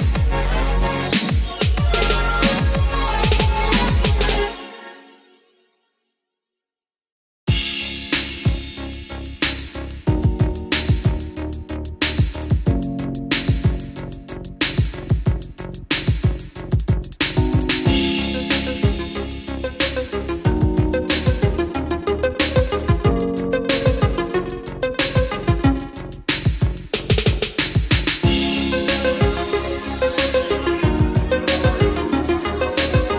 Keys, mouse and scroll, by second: 5.3 KP_5, 6.9 click, 9.5 scroll down 1, 10.2-10.9 scroll up 1, 13.8-17.3 drag, 17.7 KP_1, 19.7 click, 20.9 KP_5, 22.2-23.0 scroll down 1, 23.8 click, 25.8 F4, 28.5-32.6 drag.